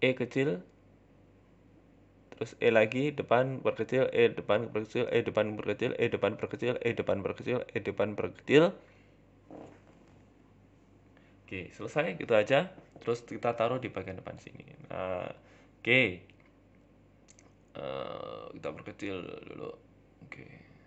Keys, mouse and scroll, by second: 0.0-8.5 typing, 1.4 scroll up 2, 9.8 Tab, 10.0 middle click, 10.3-10.8 scroll down 6, 10.4 middle click, 10.8 shift+middle click, 11.2-13.6 typing, 12.2 shift+middle click, 12.6 shift+middle click, 13.0 scroll up 2, 13.1 shift+middle click, 15.2-15.9 scroll up 3, 15.2 shift+middle click, 16.4 middle click, 17.0 KP_3, 17.5 KP_1, 17.9 shift+middle click, 18.6 g, 19.0 s, 20.6 shift+middle click.